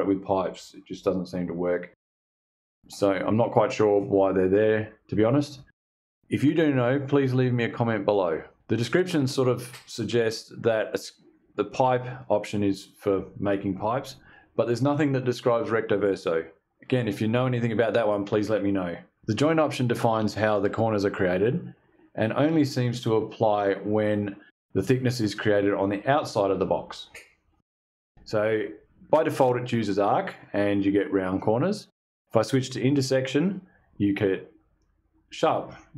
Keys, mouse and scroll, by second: 32.5 click.